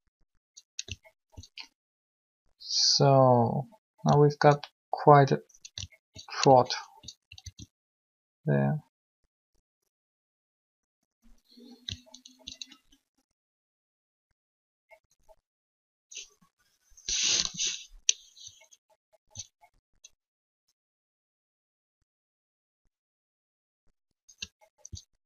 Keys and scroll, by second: 7.4 alt+shift+a.